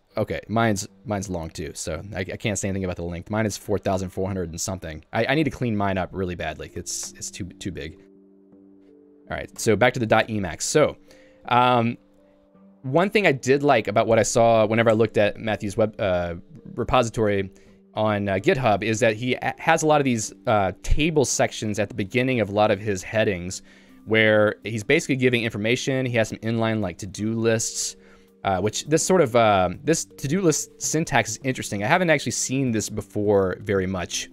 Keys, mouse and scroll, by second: 0.3 Tab, 1.4 j, 2.9 j, 3.6 k, 7.1 Return, 10.0 Return, 10.9 j, 21.5 Escape, 22.2 ctrl+d, 23.0 ctrl+d, 25.7 ctrl+u, 26.2 j, 27.2 ctrl+d, 27.7 ctrl+d, 28.7 ctrl+u, 29.4 ctrl+d, 29.6 j, 32.8 Escape, 34.0 k.